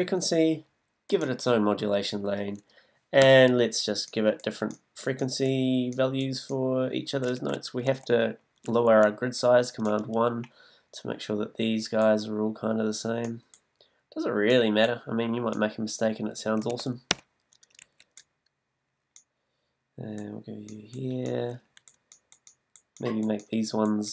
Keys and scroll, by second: 3.2 b.